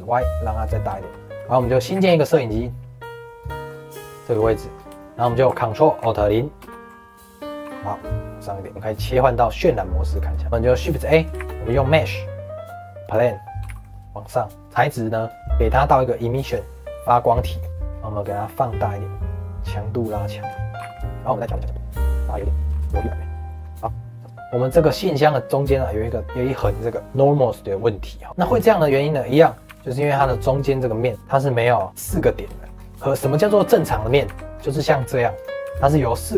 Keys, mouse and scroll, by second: 0.9 shift+middle click, 1.6-1.9 scroll down 3, 1.9 shift+a, 3.6-4.0 scroll up 1, 4.0 shift+middle click, 4.3-4.7 scroll up 2, 4.7 scroll down 1, 4.9-6.6 shift+middle drag, 6.6 ctrl+alt+KP_0, 7.6 g, 8.7 shift+middle click, 9.7 click, 11.3 shift+a, 13.6 g, 14.5 middle click, 14.5 click, 15.2-17.7 drag, 17.7 middle click, 17.8 scroll up 2, 18.7-20.3 drag, 20.3 middle click, 20.7 g, 21.1 scroll down 5, 21.4 g, 22.6 g, 22.9 g, 23.5 middle click, 23.5 scroll up 2, 23.7 middle click, 23.8 scroll down 2, 23.8 middle click, 24.8 click, 28.3 middle click, 28.5 Tab, 29.1 middle click, 29.3 scroll up 2, 29.6 3, 30.0 shift+middle click, 30.5 click, 31.1 middle click, 31.6 1, 31.9 click, 32.4 shift+middle click, 32.7 scroll down 1, 33.0 shift+middle click, 33.3 scroll up 2, 33.6 shift+middle click, 34.0 scroll down 1, 34.2 3, 34.5 scroll up 2, 34.8 shift+middle click, 35.3 click, 35.6 1, 36.2 click.